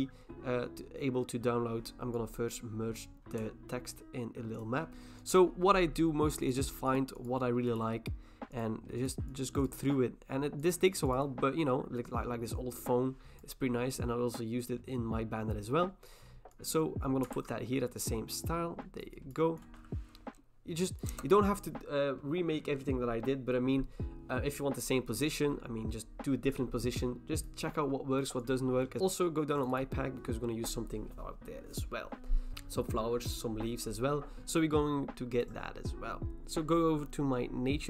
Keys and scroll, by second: 4.9 Return, 17.3 ctrl+t, 21.1 Return.